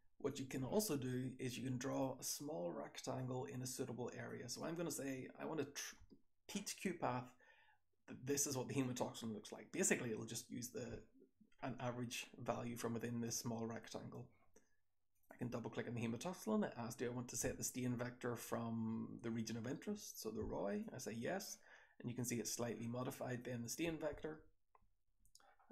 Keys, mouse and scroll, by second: 0.2 click, 0.2 scroll up 1, 1.8 click, 3.2-4.2 drag, 4.5-5.7 drag, 15.0 click, 15.2 click, 15.3-15.7 scroll up 1, 23.2 click, 24.1 2, 24.8 3, 25.4-25.7 scroll down 2.